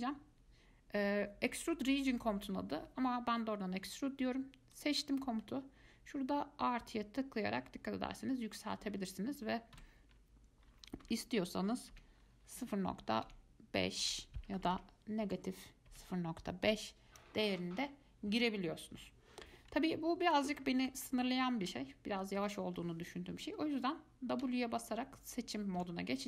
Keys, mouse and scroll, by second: 4.9 click, 6.5-9.5 drag, 20.0-24.9 middle drag, 26.0 w.